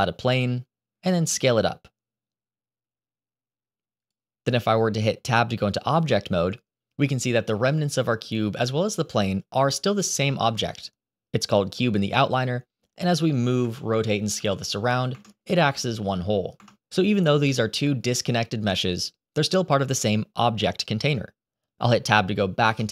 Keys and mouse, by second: 1.2 s, 5.8 Tab, 12.3-12.7 middle drag, 13.0 g, 14.2 r, 15.5 s, 22.5 Tab.